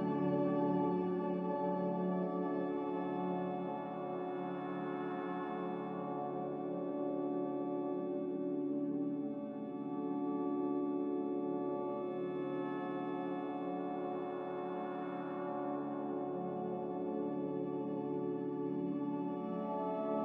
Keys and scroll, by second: 2.9 c.